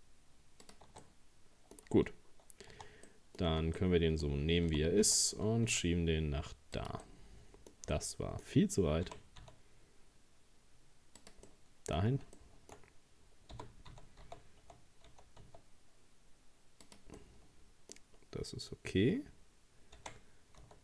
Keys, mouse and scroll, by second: 0.9 Tab, 1.0 middle click, 1.8-2.8 scroll down 2, 2.8 Tab, 3.1 middle click, 3.5 Tab, 3.8 middle click, 4.7 g, 7.1-9.1 middle drag, 9.1 g, 11.5 middle click, 12.0-12.4 scroll up 2, 12.4-13.6 shift+middle drag, 13.6 g, 17.2-18.2 middle drag, 18.2-18.7 scroll up 1, 20.0 r.